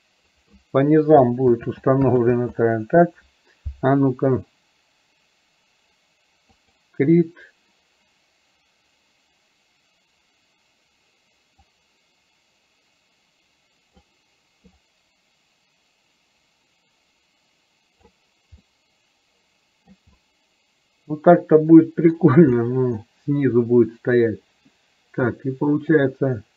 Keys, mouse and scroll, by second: 1.8 ctrl+z, 2.3 ctrl+z, 6.7 click, 11.7-14.1 drag, 14.8-18.7 drag, 18.7-20.1 middle drag, 20.2-22.2 middle drag, 22.7 middle click, 26.1-26.5 drag.